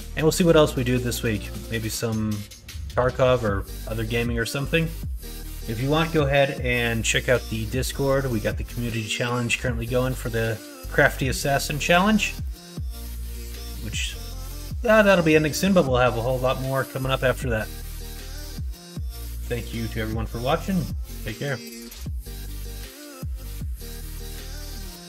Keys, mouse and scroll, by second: 0.4 middle click, 1.2 middle click, 1.7 middle click, 2.6 middle click, 3.7 middle click, 4.3 middle click, 5.2 middle click, 7.8 middle click, 9.1 middle click, 11.9 middle click, 12.4 middle click, 13.2 middle click, 15.1 middle click, 17.8 middle click.